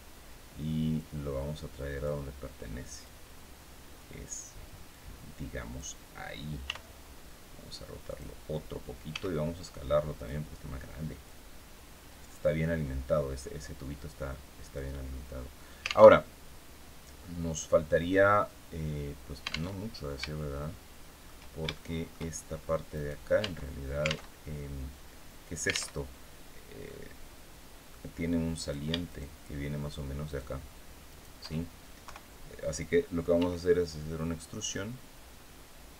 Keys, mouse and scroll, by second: 0.6-1.9 drag, 2.7-4.1 drag, 4.6-5.6 drag, 6.3 r, 7.7 click, 8.8 s, 9.8 click, 10.9-12.2 drag, 13.6-14.6 drag, 15.0-15.3 scroll down 2, 15.8 alt+Tab, 19.4 alt+Tab, 20.2 shift+click, 21.4 shift+click, 22.3 scroll up 2, 22.6 right click, 23.1 Tab, 23.7 alt+Tab, 24.0 alt+Tab, 25.6 alt+Tab, 26.5-27.7 drag, 28.2 right click, 28.7 shift+right click, 29.9 shift+right click, 30.7 shift+right click, 31.7 KP_3, 33.0 e, 35.8 click.